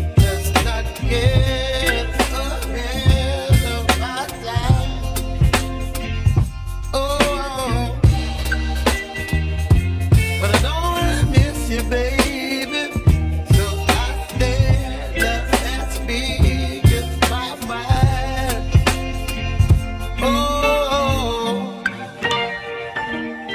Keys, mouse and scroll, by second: 1.9-2.8 scroll up 2, 2.8 ctrl+r, 7.7-8.3 scroll down 2, 8.3-10.6 shift+middle drag, 10.6 ctrl+z, 11.6-13.6 drag, 13.9 1, 15.5 scroll down 1, 17.2-23.5 drag.